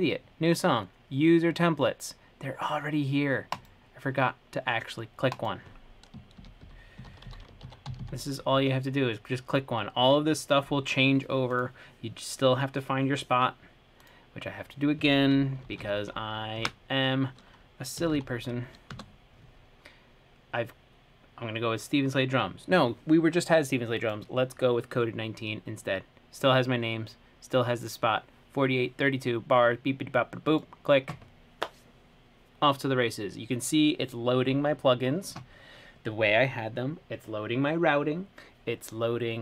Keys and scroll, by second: 6.4-8.0 typing, 10.3-11.1 typing, 15.6-16.6 typing, 16.8 Right, 18.0-18.9 typing, 19.2 Return.